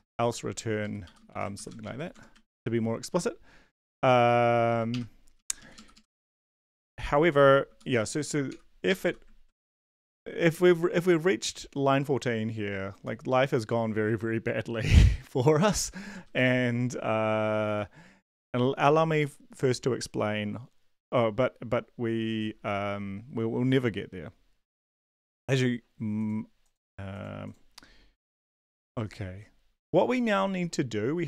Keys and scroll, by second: 0.0-0.5 typing, 0.6 Down, 0.8 Down, 1.0 End, 1.3 shift+Home, 1.7 ctrl+x, 1.7 Up, 1.8 Up, 2.5 ctrl+v, 4.2 Down, 4.7 Down, 4.9 BackSpace, 5.4 Up, 5.6 Up, 5.7 Up, 7.9 End, 8.5 ', 9.0 ;, 9.7 shift+Home, 16.1 Return, 16.3 Return, 28.1 Tab.